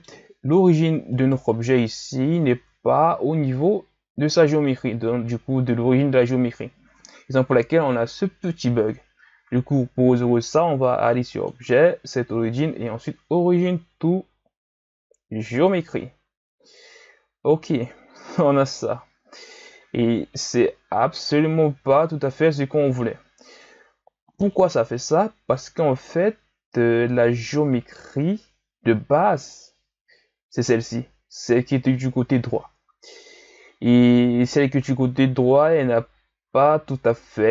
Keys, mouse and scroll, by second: 1.1 right click, 2.8-5.9 shift+scroll down 2, 7.4 KP_1, 11.3-14.3 drag, 18.1-21.1 scroll up 1.